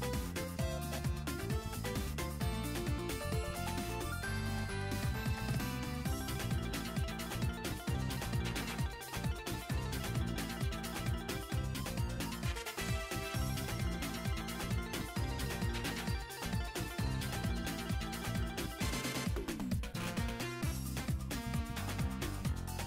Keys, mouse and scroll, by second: 1.8 scroll down 2, 1.9 middle click, 2.3-2.6 scroll up 4, 3.9 middle click, 4.4-7.3 drag, 7.5 r, 9.1 r, 11.0 r, 13.9 scroll down 2, 14.0-14.3 middle drag, 14.8 r, 18.9 click, 19.1 r, 21.1 click, 21.3 r, 22.2-22.8 scroll down 4, 22.4 middle click.